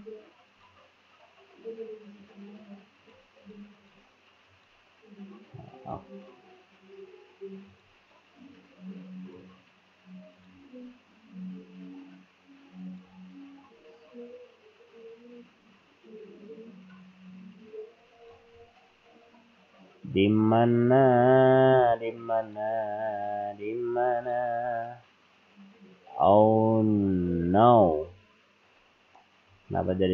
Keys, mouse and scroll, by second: 0.5 click, 2.3-3.0 scroll up 2, 3.0 click, 3.8 click, 5.9 click, 7.7 click, 10.4 click, 10.8 scroll down 1, 11.4-11.7 scroll down 2, 12.9 click, 22.4 click, 23.0 scroll down 3, 24.2 click, 28.7-29.9 scroll up 11.